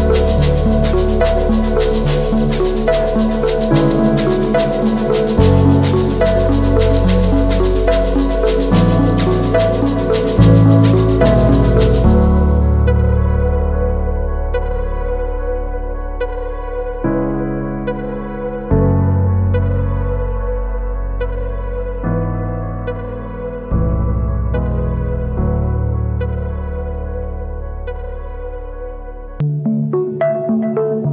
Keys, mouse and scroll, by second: 0.4 double click, 3.0 double click, 25.9 ctrl+t, 29.5 alt+shift+click.